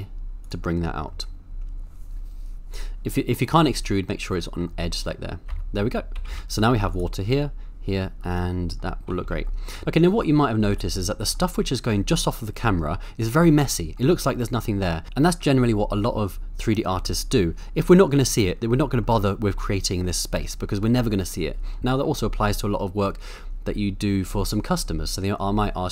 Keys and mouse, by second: 0.4 click, 0.8 middle click, 4.7 middle click, 5.5 Tab, 6.2 a, 6.3 a, 8.5 middle drag, 9.1 a, 9.2 a, 9.6 middle click, 10.8-11.3 middle drag, 13.9-14.5 middle drag, 18.8 middle click, 21.8 middle click.